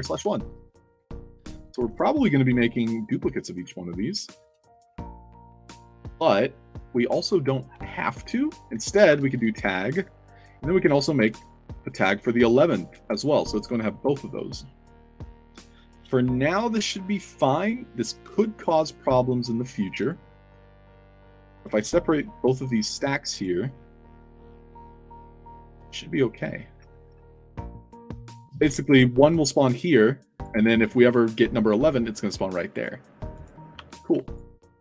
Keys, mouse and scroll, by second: 0.0-4.8 typing, 0.5 alt+right click, 0.9 alt+a, 0.9-1.4 alt+drag, 2.8 click, 3.3 click, 3.7 middle click, 5.2 click, 6.1 alt+click, 6.6 alt+click, 7.8 alt+click, 8.2 middle click, 8.8 click, 9.0 ctrl+v, 10.2 click, 10.4 ctrl+v, 11.1 1, 22.9 alt+click, 23.2 click, 23.6-24.3 drag, 24.9 drag, 27.4 click, 28.6 click, 32.6 click, 33.3 click, 33.7 f, 34.1 alt+drag, 34.6 scroll up 2.